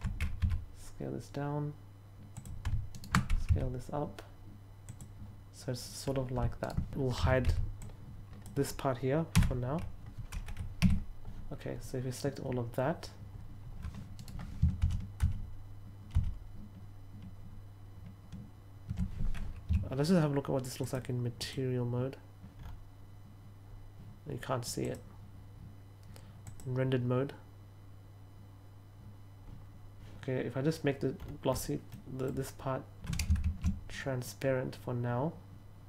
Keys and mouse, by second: 0.3 s, 2.2 click, 2.9 alt+right click, 3.4 s, 4.8 click, 6.5 alt+right click, 7.1 a, 7.7-8.3 drag, 10.7 a, 14.1 right click, 20.7 click, 21.3 click, 24.7 click, 26.4 click, 31.8 middle click, 33.3 shift+a.